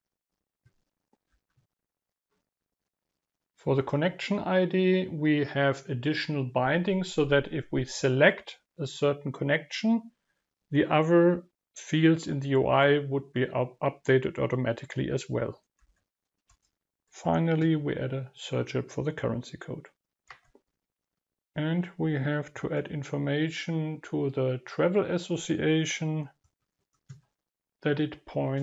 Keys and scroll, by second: 0.0 ctrl+v, 16.2 ctrl+v, 21.2 ctrl+v.